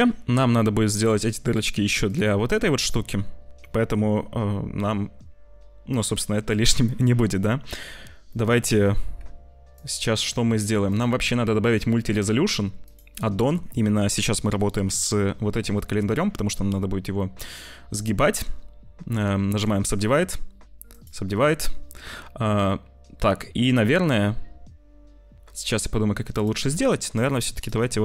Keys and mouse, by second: 1.6 middle click, 3.7 middle click, 8.2 middle click, 9.1 z, 10.8-12.9 drag, 14.2 middle click, 19.4 click, 20.8 click, 26.6 Tab, 27.2 click, 27.6-28.0 drag.